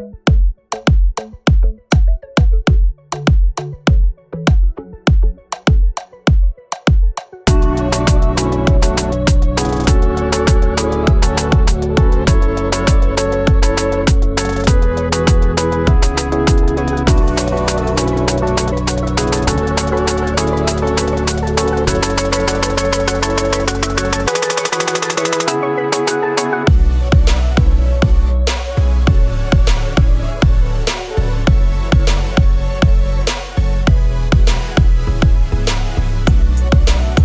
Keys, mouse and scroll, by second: 3.1 shift+click, 7.6 ctrl+=, 7.9 ctrl+=, 10.5 ctrl+[, 10.7 ctrl+[, 10.9 ctrl+[, 11.0 ctrl+[, 11.1 ctrl+[, 11.3 ctrl+[, 11.4 ctrl+[, 11.5 ctrl+[, 14.9 ctrl+shift+], 16.3 ctrl+z, 17.9 ctrl+c, 25.3 right click, 36.2 right click.